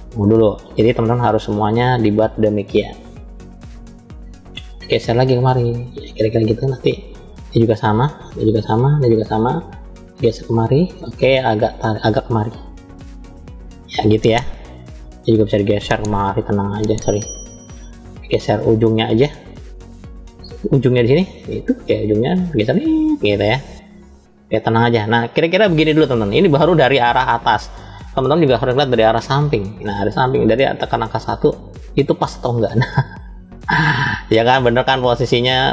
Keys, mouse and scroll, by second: 0.3 shift+click, 1.0 shift+click, 1.5 shift+click, 3.3 click, 4.5 click, 4.8-6.5 drag, 7.3 click, 8.3 shift+click, 8.9 shift+click, 10.0 click, 11.6 click, 12.6-14.2 drag, 14.7 click, 15.6-16.7 drag, 17.2 ctrl+z, 18.1 click, 18.6 click, 19.4 click, 20.2 click, 21.3 click, 22.4-23.5 drag, 25.4 scroll down 2, 27.6-28.7 scroll down 1, 28.7 KP_1, 29.8 shift+middle click, 31.1-31.4 scroll up 2, 32.4-35.7 middle drag, 32.4 scroll up 3.